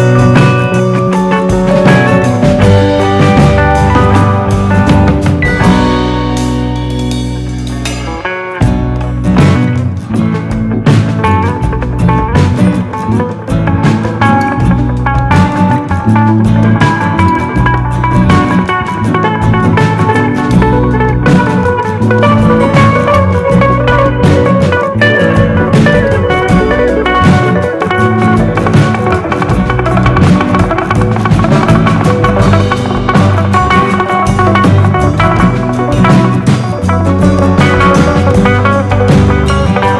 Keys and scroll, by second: 3.4 super+d, 8.3 super+d, 8.8 super+d.